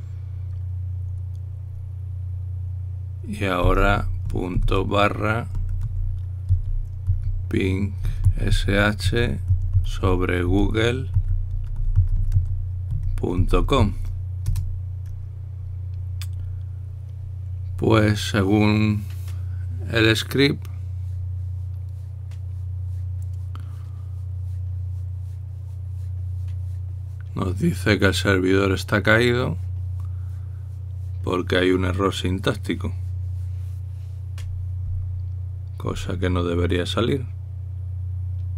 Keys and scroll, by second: 5.1-15.0 typing, 15.3 Return.